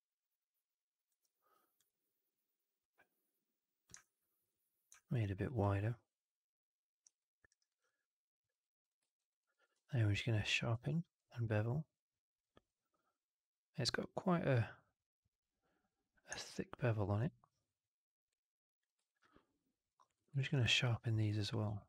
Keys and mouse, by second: 2.8-3.8 drag, 3.9 alt+click, 4.9 alt+click, 6.9 click, 7.1 alt+click, 7.4 alt+right drag, 7.6 alt+right drag, 7.8-8.4 alt+drag, 8.7 click, 8.9 alt+middle drag, 9.1 alt+right drag, 9.3 alt+drag, 9.6 q, 10.6 q, 19.0 alt+right drag, 19.1-19.8 alt+drag, 20.1 click, 20.3 alt+drag, 20.5 q, 21.6 q.